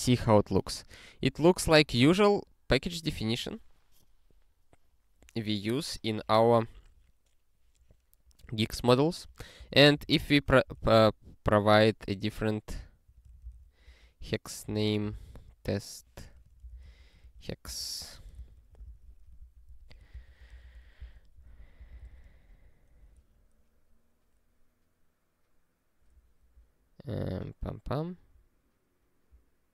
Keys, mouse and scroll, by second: 8.9 click, 9.6 Return, 9.7-11.4 typing, 12.8-18.1 typing, 18.3 Return, 18.9 ctrl+s, 19.4 ctrl+alt+f, 19.6 ctrl+alt+f, 20.1 Return, 20.5 ctrl+alt+f, 21.0 Return, 21.5 ctrl+s, 21.7 ctrl+e, 26.7 scroll up 1, 28.4 scroll up 1.